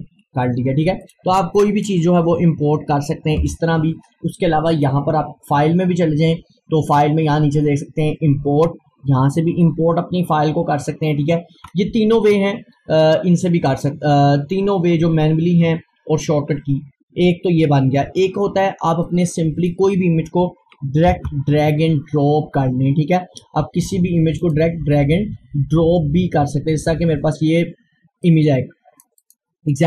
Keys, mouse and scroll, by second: 1.0 click, 2.2 scroll down 1, 2.7 scroll up 1, 3.5 Delete, 4.7 click, 13.7 click, 19.1-21.1 drag, 21.1 super+e, 23.2-24.4 scroll down 1, 24.4 click, 25.2-26.6 scroll down 1, 28.3 click.